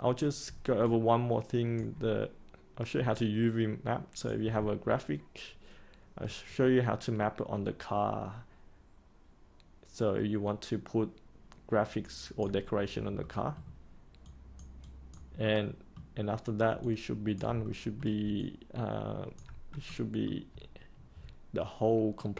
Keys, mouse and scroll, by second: 0.8 alt+click, 3.1-4.2 alt+drag, 4.8-5.1 scroll up 1, 6.4-12.4 alt+drag, 13.2 middle click, 14.2 click, 15.4 middle click, 16.8 alt+click, 17.6 middle click, 18.3 alt+click, 19.8 middle click.